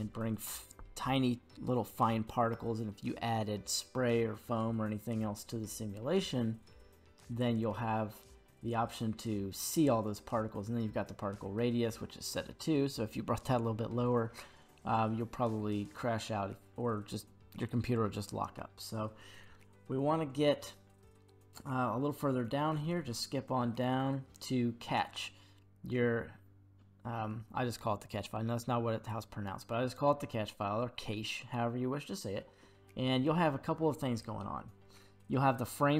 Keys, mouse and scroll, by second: 14.5-17.5 scroll down 1, 30.2-33.3 scroll down 1.